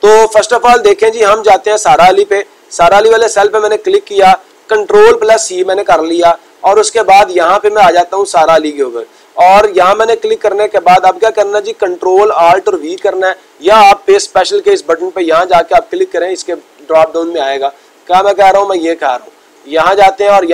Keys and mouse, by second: 1.8 click, 7.6 click, 18.4-19.5 drag, 19.8-20.5 drag.